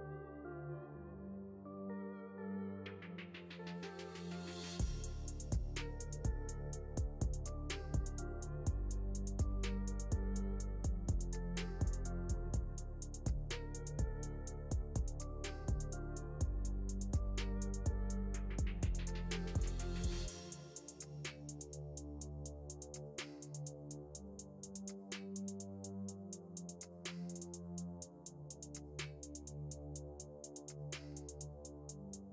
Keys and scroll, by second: 19.6 shift+Page_Down, 24.5 ctrl+z.